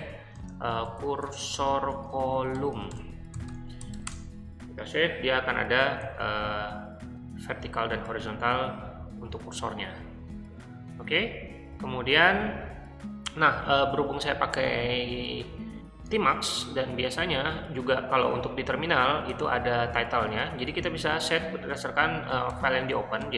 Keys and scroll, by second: 0.0-4.4 typing, 5.9-6.6 typing, 8.0-9.3 typing, 22.5 o, 23.2 Return.